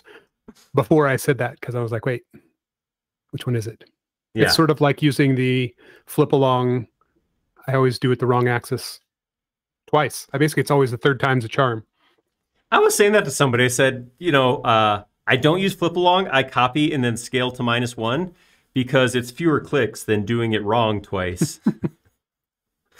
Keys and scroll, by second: 1.2 q, 5.8 Up, 9.9 space.